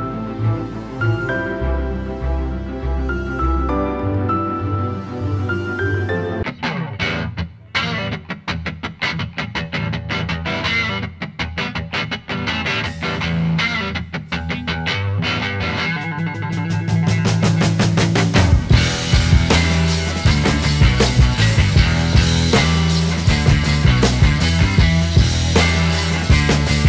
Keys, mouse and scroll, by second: 14.5 alt+right click, 16.4 alt+right click, 16.8 alt+right click, 18.3 alt+right click, 20.4 alt+right click, 20.7 alt+right click, 21.6 alt+right click.